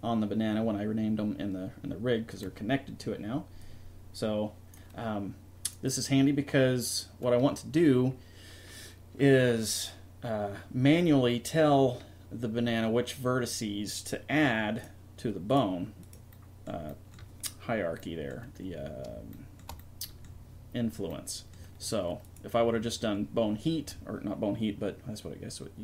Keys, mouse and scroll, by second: 16.3 click, 16.9-17.9 drag, 19.8 middle click, 22.2-23.4 drag, 23.4 right click, 23.9 click.